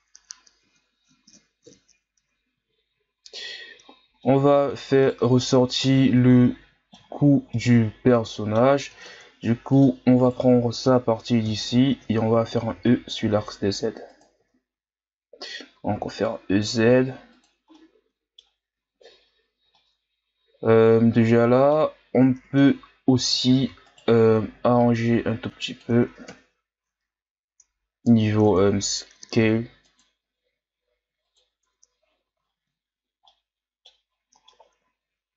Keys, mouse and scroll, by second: 0.9-1.7 shift+scroll down 2, 1.7 KP_3, 4.2-5.0 middle drag, 5.0 right click, 5.2 Tab, 5.8-7.2 middle drag, 7.2 shift+scroll down 1, 7.5-9.0 middle drag, 9.0 ctrl+Tab, 10.2 right click, 11.4 KP_1, 12.8 e, 14.5-14.8 shift+scroll down 1, 14.8-15.9 scroll up 1, 15.9 e, 17.7-22.4 middle drag, 22.4 ctrl+Tab, 23.9 alt+right click, 24.8-26.3 drag, 26.3 KP_1, 27.5 Tab, 28.5 Tab, 29.4 ctrl+r, 31.6 Tab, 32.1 a, 32.4-33.2 scroll down 1, 33.2-34.1 middle drag, 34.1-34.4 scroll up 1, 34.4-35.3 middle drag.